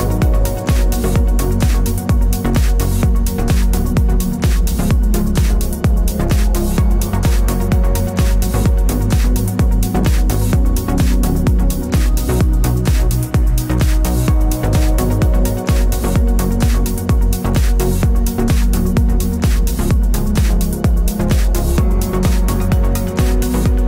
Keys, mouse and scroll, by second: 0.7 click, 5.5 KP_6, 5.7 KP_0, 5.8 KP_Enter, 7.9 click, 8.7 KP_7, 9.3 KP_0, 9.5 KP_Enter, 11.1 ctrl+click, 12.3 click, 14.1 d, 15.2 click, 23.6 click.